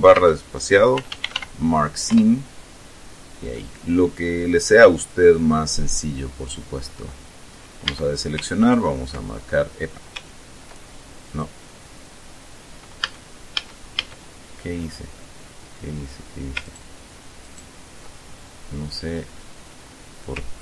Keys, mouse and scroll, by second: 0.4-2.1 typing, 2.4 Return, 3.8-5.7 drag, 8.1 a, 8.9 ctrl+right click, 11.6 right click, 13.3 a, 14.6-15.6 scroll down 2, 16.9 ctrl+right click, 17.7 ctrl+right click, 18.5-19.0 ctrl+scroll up 3, 19.5-19.9 scroll up 2.